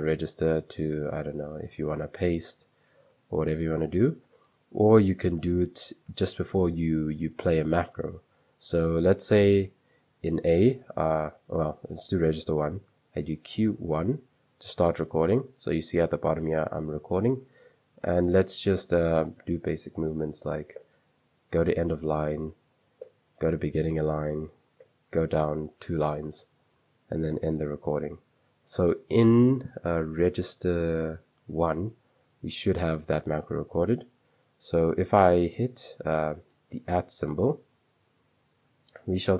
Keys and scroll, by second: 0.0-2.1 typing, 3.2 typing, 6.5-7.1 typing, 8.5-9.3 typing, 13.6-14.3 typing, 22.8-23.6 typing, 24.6 j, 24.9 j, 27.4 q, 33.5 j, 35.4 j, 37.0 @, 38.9-39.3 typing.